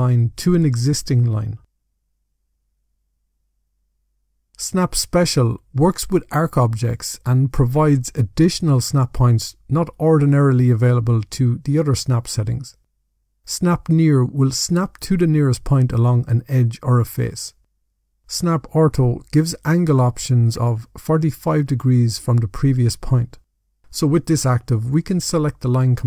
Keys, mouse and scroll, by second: 0.1 click, 1.9 click, 3.7 click, 24.6 click.